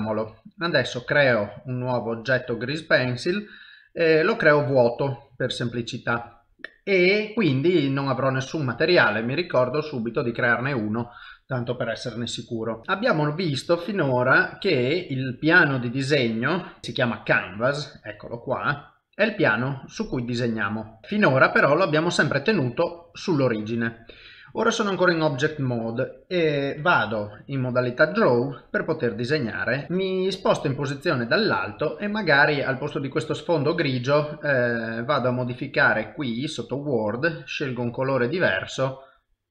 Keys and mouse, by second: 1.0 shift+a.